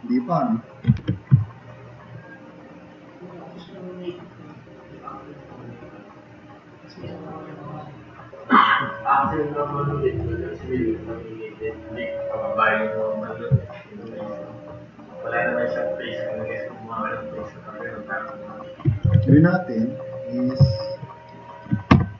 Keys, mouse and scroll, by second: 1.0 1, 2.2 drag, 3.9 middle click, 6.9-8.4 drag, 9.6 click, 10.1 click, 10.5 click, 13.2 click, 19.1 3, 21.9 t.